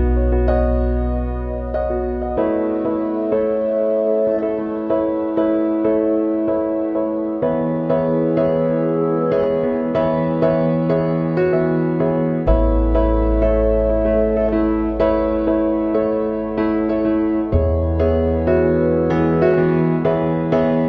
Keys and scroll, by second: 4.1 ctrl+0, 5.4 ctrl+=, 11.7 ctrl+-, 12.3 ctrl+0, 13.3 ctrl+=, 13.8 ctrl+=, 15.8 ctrl+-, 15.9 ctrl+0.